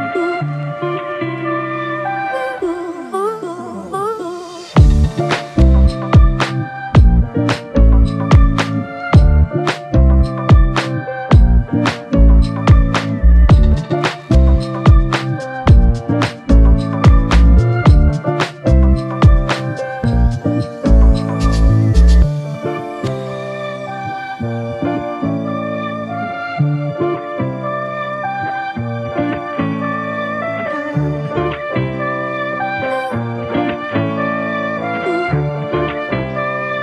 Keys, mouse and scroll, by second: 2.5 ctrl+click, 7.4 ctrl+click, 17.7 ctrl+click, 21.2 ctrl+click.